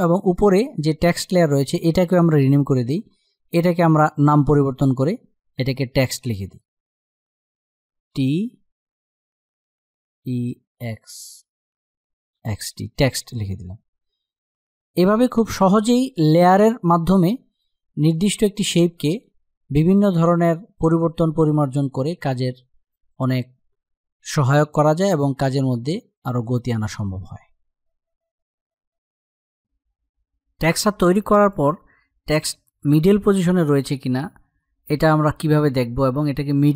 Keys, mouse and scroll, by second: 0.0 click, 7.1 shift+Num_Lock, 7.1 click, 7.7 shift+t, 9.9 e, 11.8-12.8 typing, 14.5 click, 17.2-24.9 drag, 25.9-28.8 drag, 32.0 click.